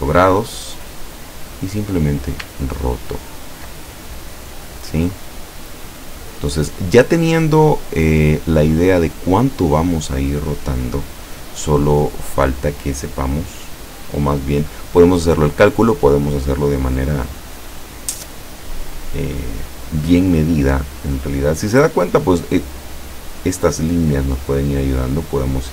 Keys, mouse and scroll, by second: 1.6 click, 2.6-4.2 ctrl+scroll down 4, 4.3 click, 4.5 middle click, 6.4 click, 7.3 click, 14.1 click.